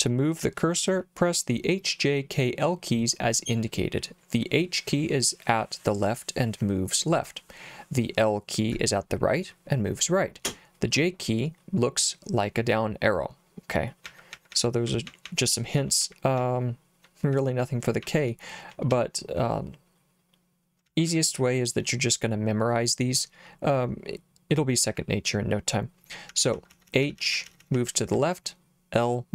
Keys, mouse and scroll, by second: 0.4 j, 13.8-18.9 typing, 20.9 j, 21.1 j, 21.3 j, 26.1-28.6 typing.